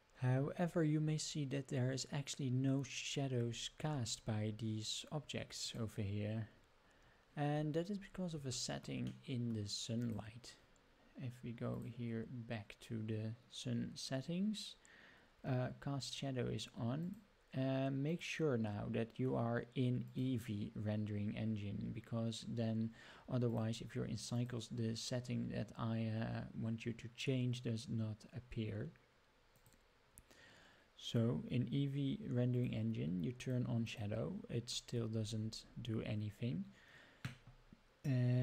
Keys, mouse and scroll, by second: 0.3-3.4 scroll up 8, 3.4-4.3 scroll down 6, 4.4 scroll up 4, 5.6 click, 7.5-8.3 scroll down 7, 8.6-8.9 shift+middle drag, 9.2-9.5 middle drag, 10.0 click, 11.7 click, 17.1 click, 18.1-20.3 drag, 23.5-24.4 drag, 29.6 click, 32.5 click, 33.4 click, 33.8 click, 34.7 middle drag, 35.1-35.8 scroll up 12, 36.1-36.8 scroll down 2.